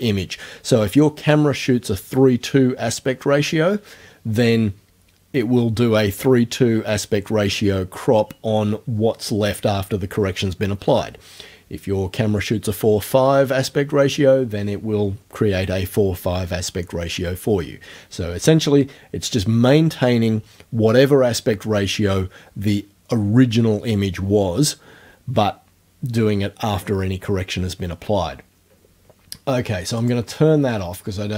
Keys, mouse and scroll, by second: 30.0 click.